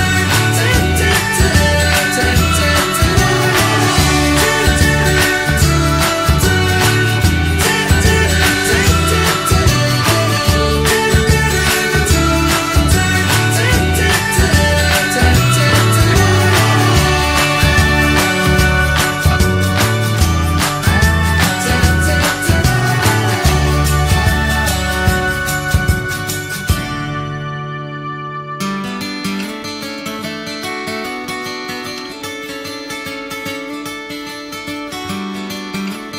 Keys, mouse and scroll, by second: 0.3-0.6 scroll down 1, 0.6-1.8 middle drag, 1.8 shift+d, 2.3-4.0 alt+middle drag, 4.5-5.6 shift+middle drag, 5.6 click, 6.7-7.7 middle drag, 7.7 s, 8.4 alt+middle click, 8.8 scroll up 1, 9.1 shift+middle click, 9.9 alt+z, 10.3 click, 10.9 middle click, 11.3 alt+z, 11.6-12.8 middle drag, 12.8 s, 13.6 alt+middle click, 15.1 click, 15.6 scroll down 1, 15.8 middle click, 16.2 alt+z, 16.5 middle click, 17.4 click, 18.1 scroll down 2, 18.3-19.7 middle drag, 19.7 click, 19.9-21.1 middle drag, 21.1 alt+z, 21.7 middle click, 22.1 click, 22.4 click, 22.6 middle click, 23.3 click, 23.5 scroll up 2, 23.7 middle click, 24.1 click, 24.4 Tab, 25.1 click, 25.6 alt+middle click, 25.9 alt+middle click, 26.7 click, 27.3 alt+middle click, 28.6-30.1 alt+middle drag, 30.1 alt+z, 30.3 scroll up 3, 30.5 shift+middle click, 30.9 click, 31.7 ctrl+z.